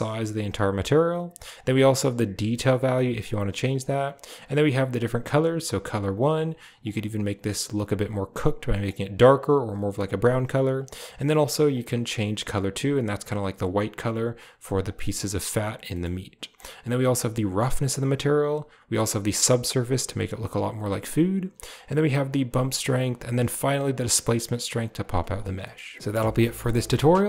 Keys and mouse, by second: 1.4-3.1 drag, 3.5 click, 10.6 click, 15.8 middle click, 16.4-17.8 drag, 18.4-20.8 drag, 21.6-22.8 drag, 23.1-24.9 shift+drag, 25.5 click.